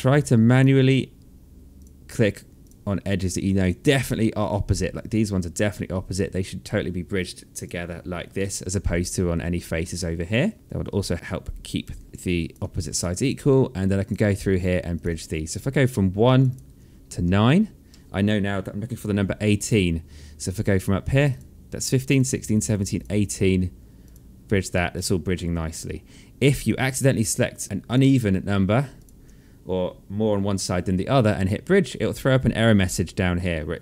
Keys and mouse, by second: 0.1 shift+click, 1.3 shift+click, 7.1 click, 9.4 alt+middle click, 11.0 alt+middle click, 12.0 alt+middle click, 12.3 click, 12.8 shift+click, 15.9 shift+click, 20.0 shift+click, 23.6 click, 24.5 alt+middle click, 26.1 click, 27.2 shift+click, 27.6 shift+click, 28.5 shift+click, 30.8 click.